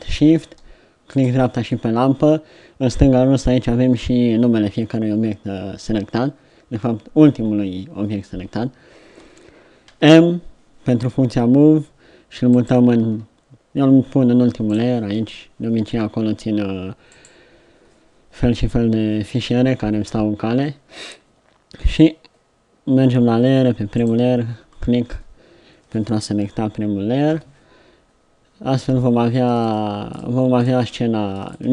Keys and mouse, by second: 1.3-2.9 right drag, 10.0 m, 17.3-27.4 drag, 27.4 KP_1.